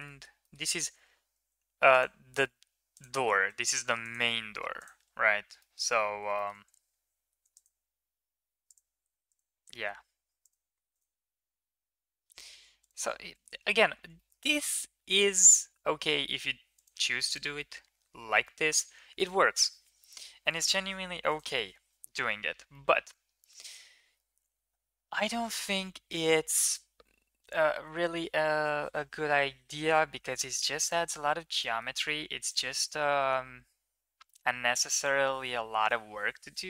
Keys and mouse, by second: 0.3 middle click, 1.1 ctrl+r, 3.5 ctrl+r, 4.8 Tab, 5.4 middle click, 5.7 Tab, 6.2 shift+middle click, 7.1 ctrl+r, 8.9 ctrl+r, 10.8 ctrl+r, 13.3 middle click, 14.1 middle click, 14.8 ctrl+r, 16.8 Tab, 17.4 middle drag, 17.8 ctrl+s, 18.3 shift+middle click, 18.6-19.1 middle drag, 30.6 click, 31.4 middle drag, 32.2 click, 32.7-34.5 middle drag.